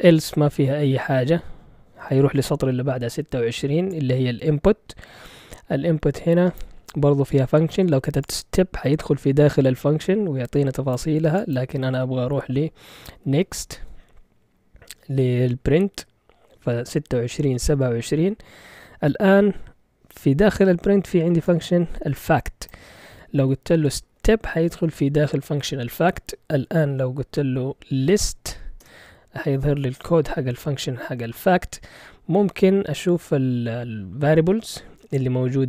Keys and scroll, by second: 12.8-14.0 typing, 23.5-24.7 typing, 24.9 Return, 28.5 typing.